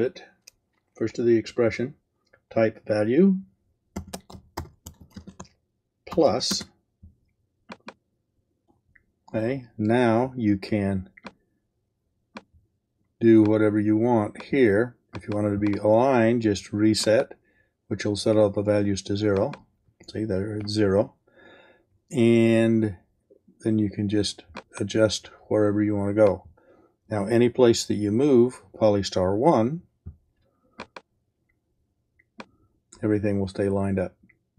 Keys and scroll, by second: 3.7-7.2 typing.